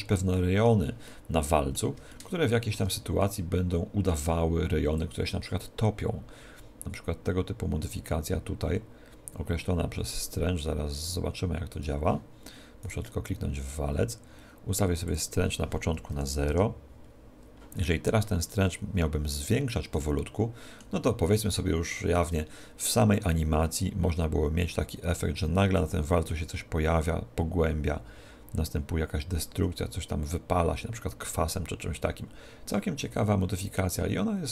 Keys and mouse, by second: 5.5 click, 13.3 right click, 15.3 click, 18.6-21.8 middle drag, 23.4 click.